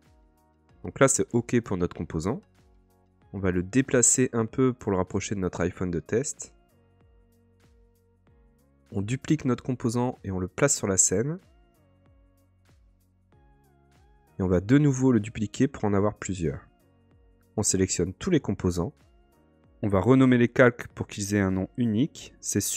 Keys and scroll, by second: 16.4 super+d, 19.9 super+r.